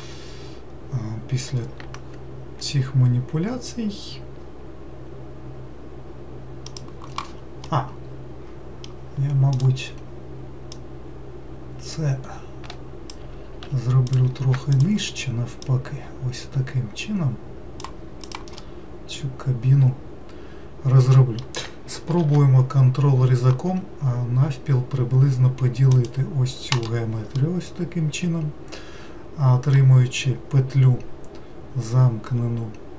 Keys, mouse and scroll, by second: 7.7-9.6 middle drag, 9.6-13.4 drag, 13.4 ctrl+z, 14.1 click, 14.7 shift+click, 15.6 click, 18.2 click, 18.6-21.7 middle drag, 22.2 ctrl+r, 27.4-30.4 middle drag.